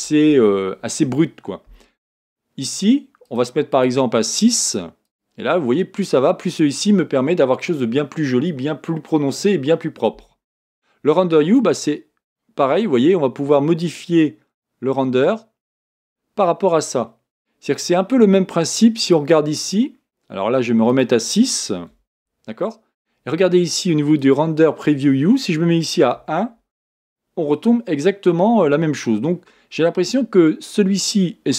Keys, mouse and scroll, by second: 3.2-6.1 drag, 11.5-14.6 drag, 17.9 click, 17.9 click, 18.0 click, 18.9 click, 20.9-23.9 drag, 24.2-27.2 drag.